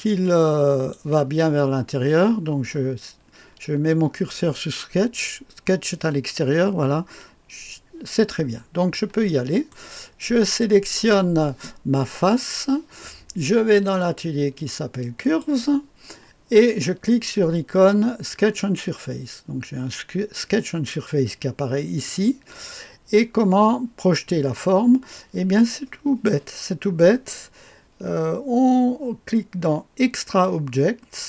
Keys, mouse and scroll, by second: 0.2-2.8 drag, 8.1 click, 12.2 click, 13.9 click, 15.2 click, 18.5 click, 22.0 click.